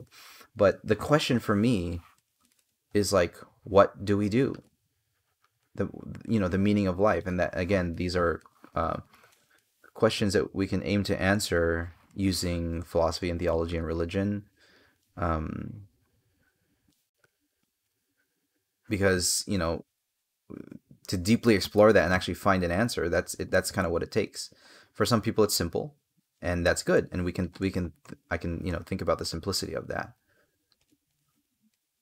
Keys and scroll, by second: 2.0 space, 7.7 space, 11.9 space, 26.7 space.